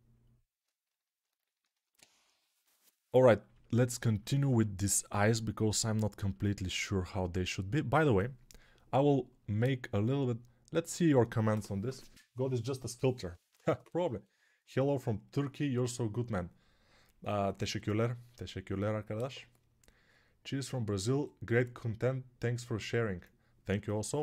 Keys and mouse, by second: 1.2-6.8 ctrl+alt+drag, 1.2-6.8 ctrl+alt+middle drag, 1.2-6.8 ctrl+alt+right drag.